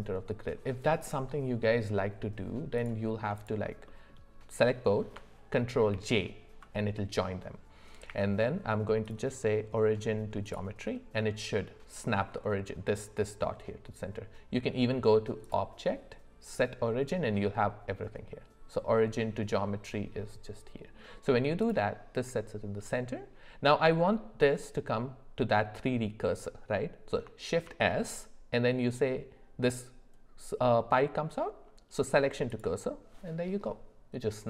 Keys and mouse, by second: 2.8 click, 3.4 shift+click, 3.8 middle click, 5.9 ctrl+j, 8.1 q, 15.4-20.9 drag, 27.6 shift+s.